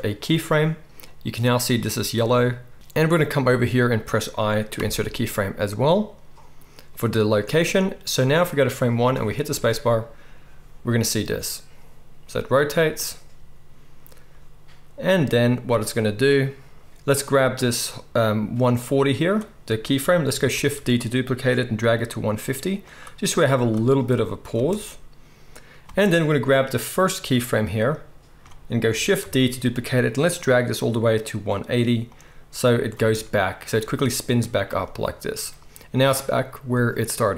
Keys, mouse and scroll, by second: 4.7 i, 9.1 space, 15.7 space, 20.5 shift+d, 22.9-23.2 middle drag, 23.2-23.7 drag, 23.7-24.0 middle drag, 24.0-32.1 drag, 24.5 space, 25.8 space, 29.2 shift+d, 32.1-32.5 middle drag, 32.5-37.3 drag, 32.9 space.